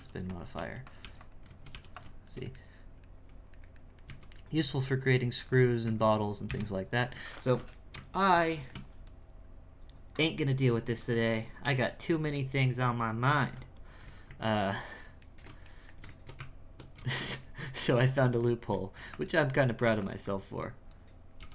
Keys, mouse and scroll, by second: 0.5 e, 1.7 e, 2.3-4.0 shift+middle drag, 4.0 a, 4.5 x, 5.8 Tab, 6.4 KP_1, 7.4-11.6 ctrl+shift+middle drag, 15.3-16.4 ctrl+middle drag, 16.4 Tab, 17.3-18.9 shift+middle drag, 18.9 f, 19.8 f, 20.2-21.4 drag, 21.4 g.